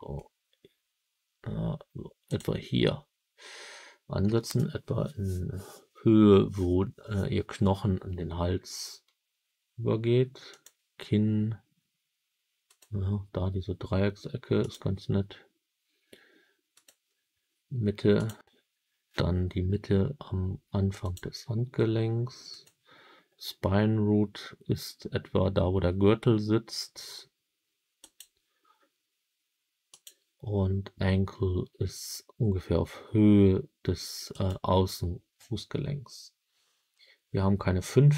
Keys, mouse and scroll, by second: 2.2 click, 10.4 click, 12.6 click, 14.6 click, 16.7 click, 18.1 click, 21.0 click, 22.4 click, 27.9 click, 29.8-30.2 drag, 34.3 click.